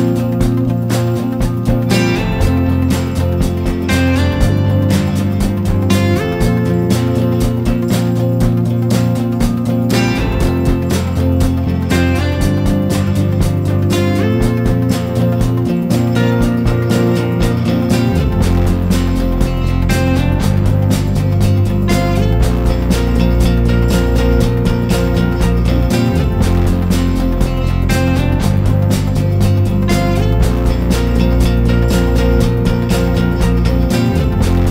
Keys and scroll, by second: 28.3 Return.